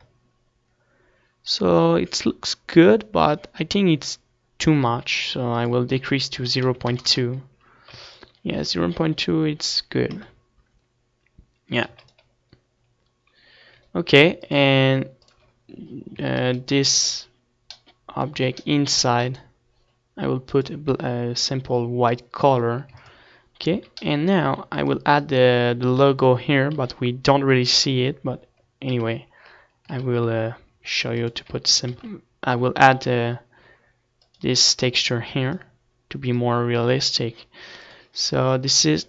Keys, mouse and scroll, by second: 6.8-8.4 drag, 9.1 ctrl+s, 11.3 KP_0, 12.9 ctrl+s, 15.6-17.0 drag, 16.9-22.5 middle drag, 17.0 z, 17.5-19.1 right drag, 18.0 z, 19.3 z, 20.3-23.4 drag, 20.3-22.5 right drag, 24.4 ctrl+s, 24.9 z, 25.1-26.8 middle drag, 25.6 ctrl+s, 26.4 click, 26.4 right click, 27.1 Tab, 28.0 KP_1, 28.9 KP_3, 30.1 ctrl+KP_1, 31.1 ctrl+KP_3, 31.8 middle click, 32.4 ctrl+s, 35.6 shift+a.